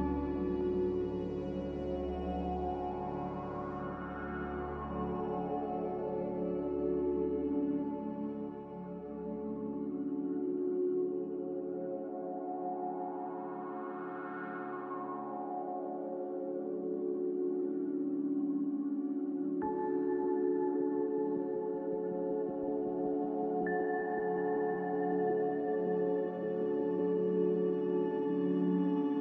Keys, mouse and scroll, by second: 3.6 Delete, 6.4 s, 8.3-12.4 typing, 16.6 f, 23.3 n.